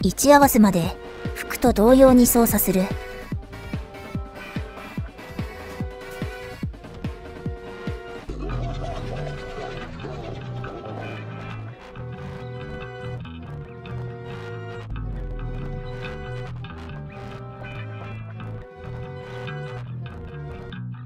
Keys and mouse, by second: 2.0-8.6 drag, 10.4-11.6 drag, 14.6 click, 15.5 click, 18.2 shift+middle click, 19.1 middle click, 20.1 middle click.